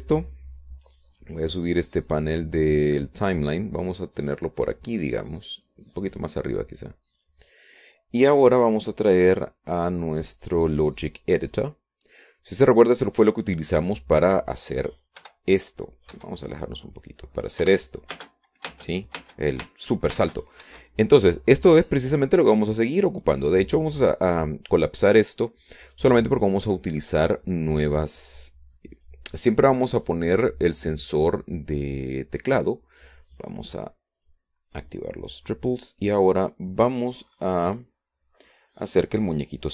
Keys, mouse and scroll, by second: 5.7-10.2 drag, 12.0 click, 14.2 click, 16.2 middle click, 18.0 p, 18.9 Escape, 19.1-19.5 scroll down 1, 19.7 click, 20.4 p, 20.9 space, 23.4 Escape, 25.8 click, 27.1 click, 28.7 click, 31.8 click, 35.3 click, 37.0 click.